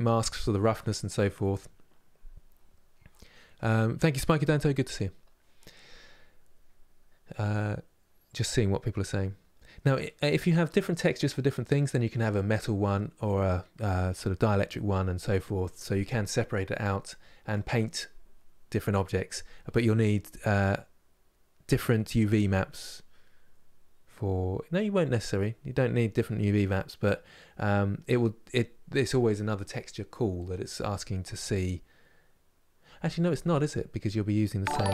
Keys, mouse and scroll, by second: 10.2-34.9 middle drag.